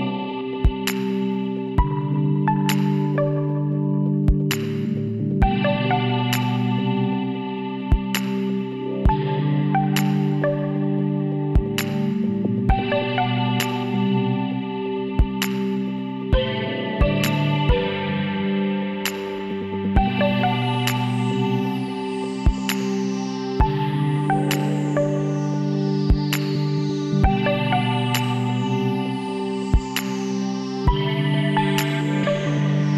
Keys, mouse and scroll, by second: 3.3 middle click, 3.4 right click, 3.6-6.7 middle drag, 6.7 w, 17.9-19.3 drag, 19.3 middle click, 19.8-21.6 right drag, 21.6 middle click, 22.3-24.2 middle drag, 25.4 w, 32.8 l.